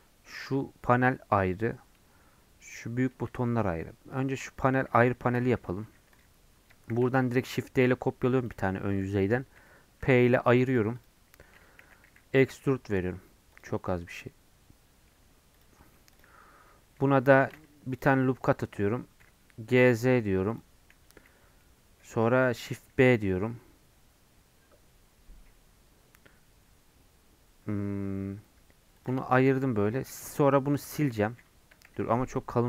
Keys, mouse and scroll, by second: 4.1 click, 5.1 ctrl+z, 5.7 Tab, 6.2 click, 6.9 shift+d, 10.3 p, 10.5 Tab, 10.7 click, 11.5 Tab, 11.8 a, 13.8-15.1 middle drag, 15.1 Tab, 15.5 click, 15.8 middle click, 16.1 click, 16.7 Tab, 17.4 ctrl+r, 19.2 g, 21.6 middle click, 22.5 ctrl+b, 29.3-30.8 shift+middle drag, 30.8 x, 31.9 ctrl+z, 32.3 middle click.